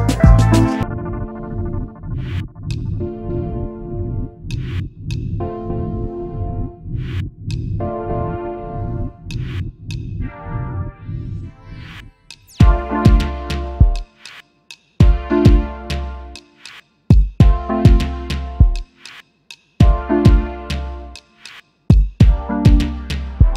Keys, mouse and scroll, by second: 0.3-1.0 alt+scroll down 1, 1.6 alt+scroll up 1, 3.7 alt+scroll up 1, 4.1 space, 5.4 ctrl+x, 7.9 double click, 9.0 ctrl+f, 10.3-10.7 alt+scroll down 1, 10.7 alt+click, 10.8 space, 10.9 double click, 12.8 double click, 13.1 alt+click, 15.9-16.5 alt+scroll down 1, 17.1 alt+scroll up 1, 17.9 space, 21.7 alt+scroll down 1, 22.2 space, 22.2 double click, 22.6 alt+scroll down 1, 22.8 space, 23.2 alt+scroll down 1.